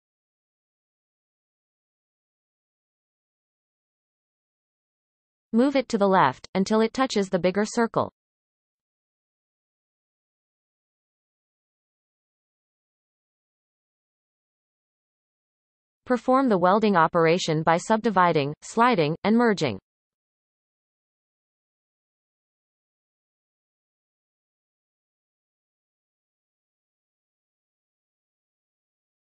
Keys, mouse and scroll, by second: 1.0-3.1 drag, 3.1 g, 5.4-6.3 scroll up 1, 6.3 g, 8.2-8.6 scroll up 1, 8.6 shift+middle click, 9.0-10.0 scroll up 6, 10.1 shift+middle click, 10.5-11.1 scroll up 4, 11.3 shift+middle click, 11.7-12.1 scroll up 3, 12.8 g, 22.7-23.1 scroll down 1, 23.1-24.7 shift+middle drag, 24.7 click, 25.4 shift+click, 27.2-29.1 right drag, 29.1-29.2 scroll up 1.